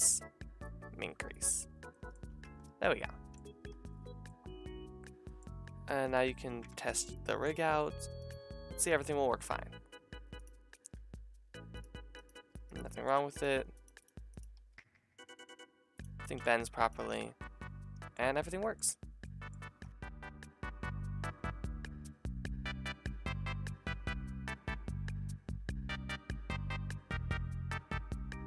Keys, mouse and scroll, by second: 2.4 Tab, 3.7 a, 3.9-8.3 drag, 6.0 middle click, 6.0 right click, 6.7 ctrl+Tab, 6.9 middle click, 6.9 right click, 7.7 r, 8.3 r, 10.7 click, 10.7 middle click, 10.7 right click, 11.0 g, 12.2 click, 12.2 middle click, 12.2 right click, 12.4 g, 13.3 click, 13.3 middle click, 13.3 right click, 13.6 r, 13.8 r, 14.3 click, 14.6 r, 17.1 alt+r, 17.5-19.2 drag, 19.2 middle drag, 19.5 click, 19.8 ctrl+Tab.